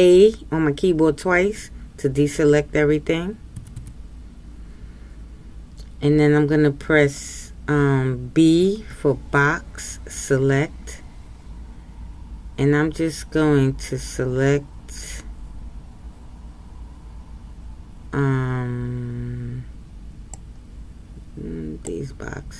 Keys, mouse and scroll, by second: 3.7 a.